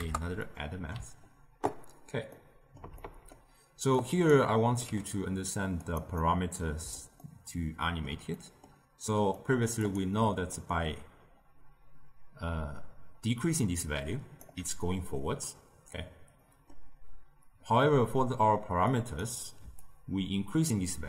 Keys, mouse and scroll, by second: 0.3-4.1 middle drag, 4.1 click, 4.9 g, 6.1-9.8 middle drag, 9.8 click, 10.5-13.5 shift+drag, 16.3-18.8 middle drag, 18.8 drag, 19.7-21.0 shift+drag.